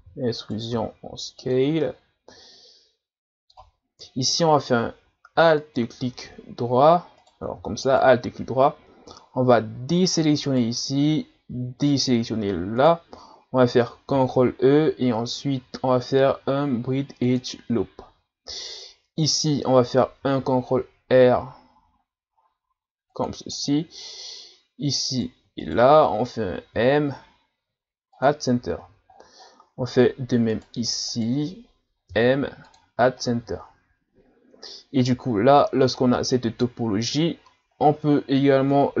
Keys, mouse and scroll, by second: 1.8-4.0 middle drag, 4.0 x, 5.6 alt+right click, 7.2 right click, 7.9 alt+right click, 10.5 shift+right click, 12.8 shift+right click, 14.1 ctrl+e, 20.2 ctrl+r, 24.0-24.4 ctrl+scroll up 3, 25.1 right click, 25.6 shift+right click, 26.8 m, 28.7-29.1 scroll down 3, 29.5 scroll down 7, 29.7-30.5 scroll up 2, 30.5 right click, 31.1 shift+right click, 32.1 m, 33.3 scroll down 2, 33.6-34.6 scroll up 5, 35.4-36.6 scroll up 1, 37.4-37.8 scroll down 2, 38.5-38.9 shift+scroll up 1, 38.9-39.0 scroll down 3.